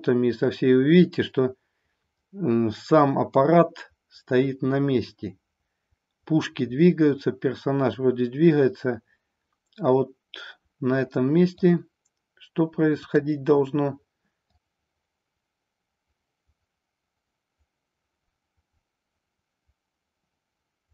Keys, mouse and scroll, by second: 12.9 click, 14.4-20.9 drag.